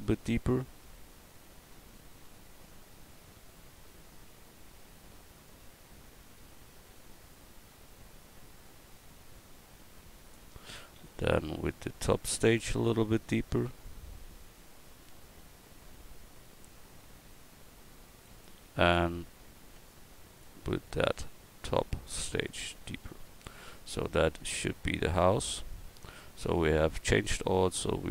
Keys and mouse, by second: 0.6-28.1 drag.